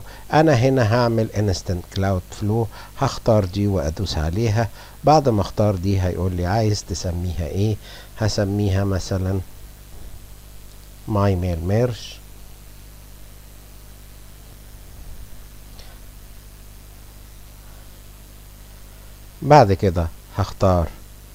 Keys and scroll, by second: 8.2 Caps_Lock, 9.1-11.6 typing, 13.2-14.7 typing.